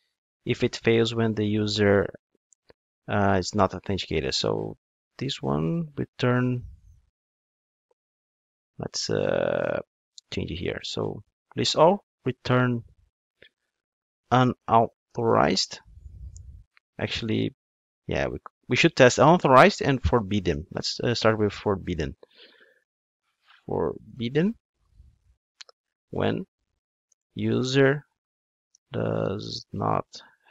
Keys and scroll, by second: 0.0 super+c, 0.6 Tab, 1.0 super+v.